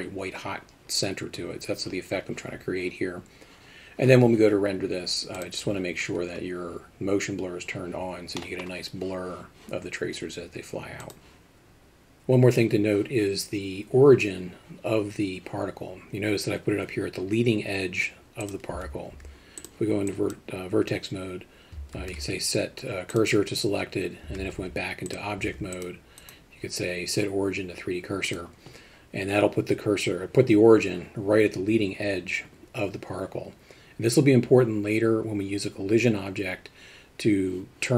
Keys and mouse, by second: 8.4 middle click, 18.5 click, 18.7 Tab, 19.1 z, 20.2 click, 22.0 shift+s, 24.3 Tab, 24.6 z, 25.5 alt+a, 25.8 click, 26.4-28.4 right drag.